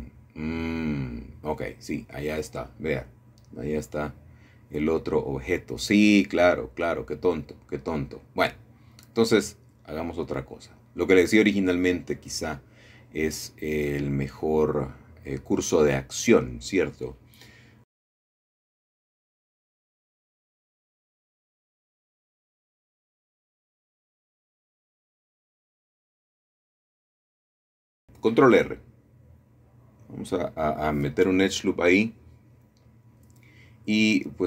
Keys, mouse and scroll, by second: 0.0 Escape, 0.7-2.0 scroll down 1, 2.0-2.8 scroll up 1, 3.2 ctrl+middle click, 3.8 ctrl+z, 4.2 ctrl+z, 4.5 ctrl+z, 6.4-8.8 ctrl+middle drag, 10.4-11.3 scroll down 1, 11.1 shift+middle click, 12.7 middle click, 15.4 middle click, 15.7-16.1 scroll up 1, 16.7 shift+middle click, 17.3 middle click, 21.1 shift+middle click, 21.7 shift+middle click, 22.5-23.3 scroll down 1, 24.8 shift+middle click, 26.4 shift+middle click, 27.8 middle click, 29.9-31.7 drag, 33.8 shift+middle click.